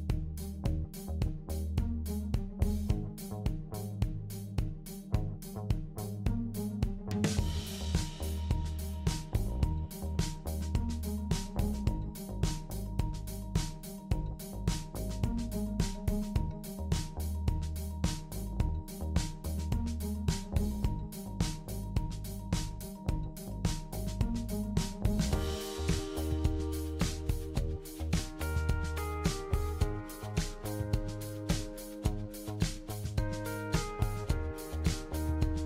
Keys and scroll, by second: 0.5-1.5 typing, 3.5-4.4 typing, 7.3-7.8 typing.